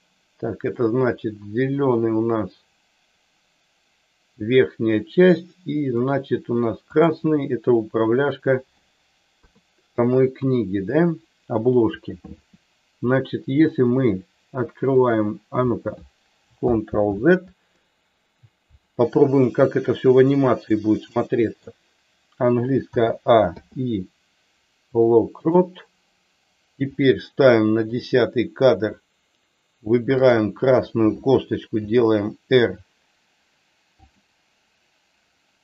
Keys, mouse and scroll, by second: 0.7-6.0 middle drag, 7.0 click, 9.3 KP_3, 10.4 KP_1, 12.2 r, 15.0 click, 16.8 ctrl+z, 19.6-20.6 drag, 21.1 middle click, 22.9 a, 23.5 i, 27.8 click, 31.7 r, 34.0 click.